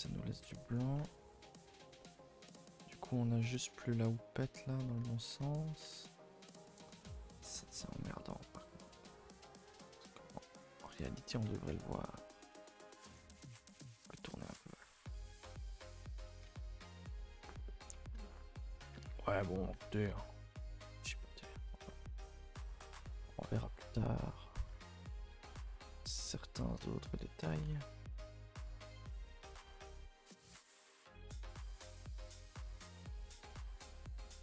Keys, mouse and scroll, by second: 0.4 shift+middle drag, 0.7 scroll up 1, 0.9 Tab, 1.2 scroll up 1, 1.4-1.9 scroll down 2, 1.9 shift+middle drag, 2.2 scroll up 1, 2.4-3.7 scroll down 1, 3.7-5.0 scroll up 1, 5.0 Tab, 5.3 Tab, 5.8 Tab, 6.5 click, 6.9 shift+click, 7.2 r, 11.4 r, 14.7 g, 15.2-15.7 scroll down 1, 15.7 r, 16.4 a, 16.5 a, 17.5-17.9 shift+middle drag, 17.9-18.6 scroll up 6, 18.2 shift+middle click, 18.6 Tab, 18.9-20.6 typing, 19.4 Tab, 19.6 click, 19.7 Tab, 20.5 click, 21.7 click, 21.7 g, 23.1 Tab, 23.4-23.9 scroll down 4, 23.9 shift+middle click, 24.1 scroll up 1, 24.7 Tab, 25.0-25.3 scroll up 1, 25.3 a, 25.4 a, 27.4 c, 28.1 g, 29.2 g, 30.5 r, 32.1-32.7 scroll down 2, 32.8-33.4 scroll up 2, 33.4 r, 33.8 g.